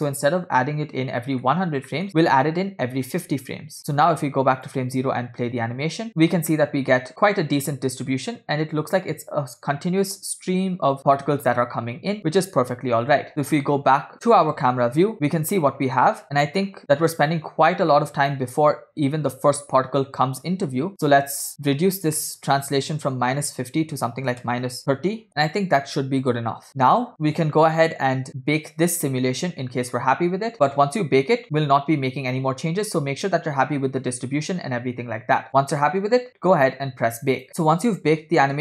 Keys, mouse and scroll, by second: 0.2 middle click, 0.5-1.1 scroll up 3, 1.3 middle click, 1.6 scroll up 2, 2.0 middle click, 2.1-3.8 drag, 4.7 click, 5.2 space, 6.6 middle click, 13.2 space, 13.3 middle click, 13.3 scroll down 2, 13.7 KP_0, 15.1 scroll down 3, 15.3 space, 16.2 middle click, 16.2 scroll down 1, 16.2 space, 17.4-18.5 drag, 18.8-19.4 scroll up 6, 20.9 middle click, 21.8 scroll up 3, 22.2 middle click, 22.6 scroll up 1, 23.5-25.3 drag, 25.3 scroll down 3, 25.3 space, 27.4 space, 28.3 space, 30.5 scroll up 5, 30.8 scroll down 3, 35.5 space, 37.4 click, 37.5 middle click, 37.5 scroll down 4.